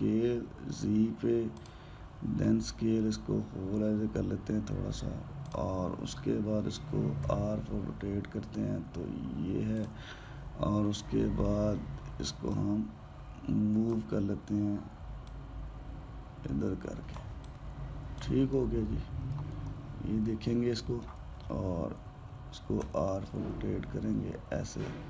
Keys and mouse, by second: 0.4 s, 3.2 s, 8.1 r, 13.3 click, 16.1 click, 18.2 alt+drag, 19.4-23.6 middle drag, 23.6 r.